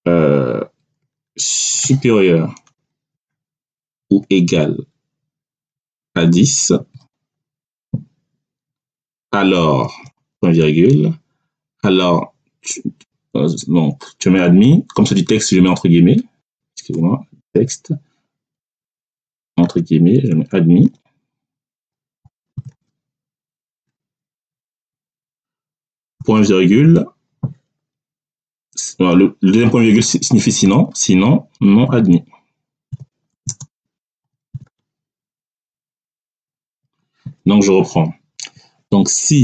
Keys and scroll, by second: 2.6 shift+\, 3.9 =, 6.1 1, 6.7 0, 9.7 ., 15.8 3, 16.8 BackSpace, 17.4 3, 18.5 BackSpace, 19.5 3, 20.7-22.6 typing, 24.5 3, 26.1 ., 30.6 3, 31.9-34.5 typing, 36.1 3, 36.6 [.